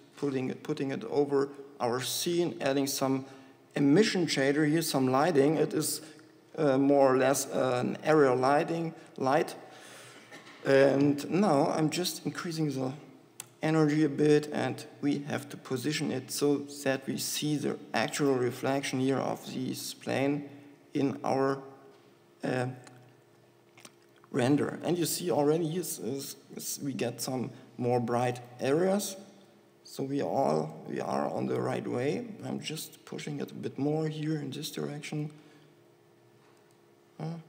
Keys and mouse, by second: 3.0-7.9 drag, 13.6 click, 15.2 KP_7, 16.0 s, 18.3 g, 20.8 g, 21.9 g, 23.4 KP_1, 27.7 g, 29.8 g, 31.5 KP_7, 33.0 g, 34.5 g, 36.1 g.